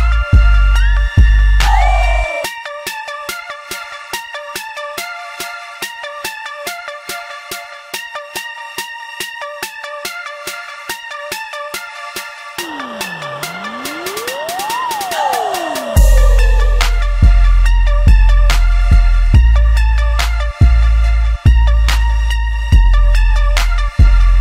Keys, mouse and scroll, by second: 1.9 shift+d, 8.2-9.3 shift+middle drag, 9.3 shift+d, 15.7-17.1 shift+middle drag, 17.1 Tab, 17.6-20.7 ctrl+middle drag, 20.7 1, 21.2 click, 22.8 ctrl+middle click, 23.5 g.